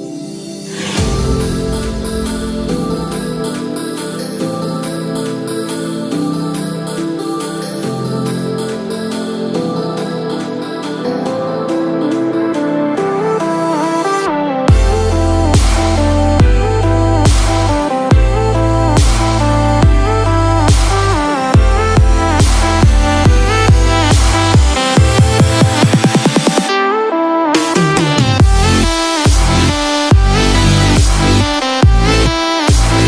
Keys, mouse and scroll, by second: 5.9 KP_0, 8.5 space, 21.7 space, 23.3 click, 26.3 click, 29.5 KP_0, 31.5 scroll up 1.